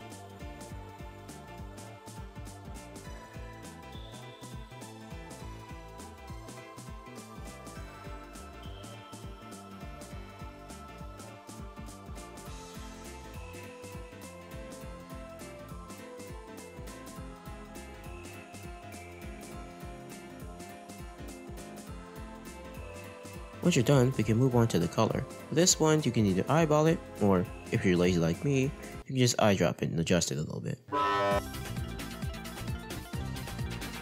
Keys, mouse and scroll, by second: 0.9-1.3 scroll up 2, 1.0 middle click, 1.7 click, 4.0-4.6 scroll up 4, 4.3 r, 5.4-5.9 scroll down 5, 5.9 middle click, 6.4 scroll down 1, 6.4 middle click, 7.0 r, 8.0 r, 10.3 r, 10.8 r, 18.8-19.8 middle drag, 22.2-23.3 drag, 23.6-24.3 scroll up 5, 24.3 middle click, 26.0 click, 31.1 click, 31.8-32.7 scroll down 7, 32.0 middle click, 32.4 middle click, 32.8-33.2 scroll up 2, 32.9 middle click, 33.3 scroll down 1.